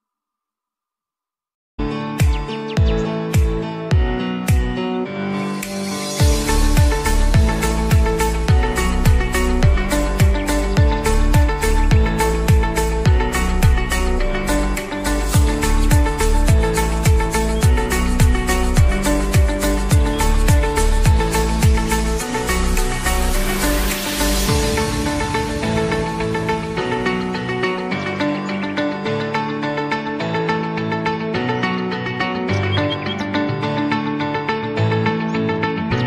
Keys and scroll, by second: 0.0-0.6 typing, 0.8 Return, 2.8 ctrl+s, 5.0 Tab, 5.2 j.